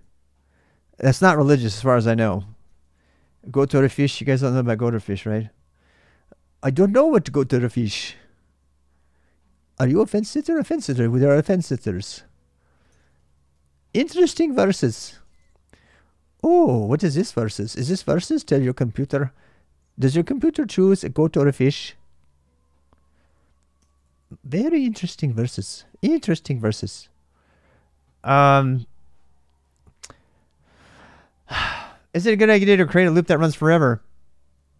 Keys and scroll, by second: 0.0-0.3 typing, 2.5 ctrl+[, 2.6 j, 2.8 j, 4.5 ctrl+[, 4.6-5.2 typing, 12.7 ctrl+[, 12.8 ctrl+j, 13.0-15.2 typing, 16.4 ctrl+[, 16.5 ctrl+j, 17.3 shift+z, 17.6 ctrl+[, 17.7 ctrl+j, 23.6 ctrl+[, 23.7-25.0 typing, 26.6 alt+Tab.